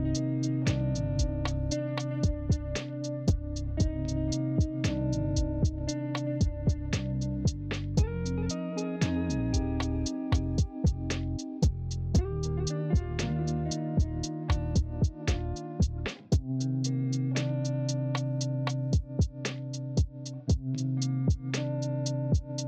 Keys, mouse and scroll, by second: 6.8 ctrl+z.